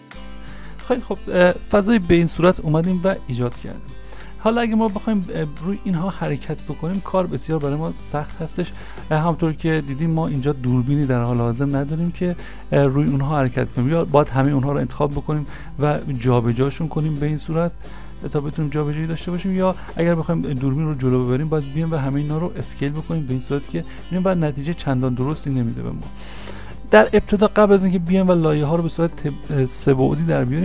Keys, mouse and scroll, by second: 4.9 s, 5.1 ctrl+a, 7.4 `, 14.1 ctrl+a, 15.0 s, 19.1 ctrl+z, 24.0 ctrl+z, 28.7 `.